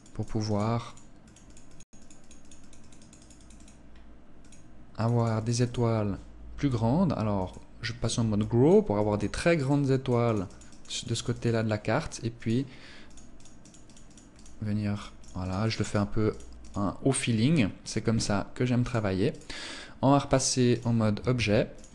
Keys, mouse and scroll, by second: 1.2 click, 1.4 click, 1.6 click, 2.0 click, 2.2 click, 2.6 click, 2.8 click, 3.1 scroll down 1, 3.6 click, 4.2 click, 4.4 click, 4.6 click, 6.6 click, 7.6 click, 8.2 click, 9.1 click, 9.4 click, 9.6 click, 9.9 click, 10.1 click, 10.3 click, 10.5 click, 11.6 click, 12.2 click, 12.8 click, 13.0 click, 14.1 click, 14.4 click, 14.8 click, 15.1 click, 15.8 click, 16.4 scroll down 1, 16.8 scroll up 2, 18.0 click, 18.5 click, 20.6 ctrl+s, 21.4-21.9 scroll down 1.